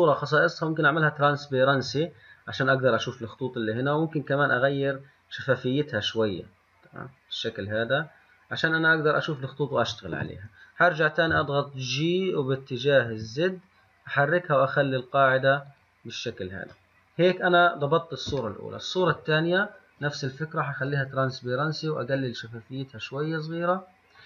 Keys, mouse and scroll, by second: 1.0 click, 4.5-7.6 drag, 11.5 g, 17.1-19.6 middle drag, 19.6 click, 21.0 click, 22.4-24.2 drag.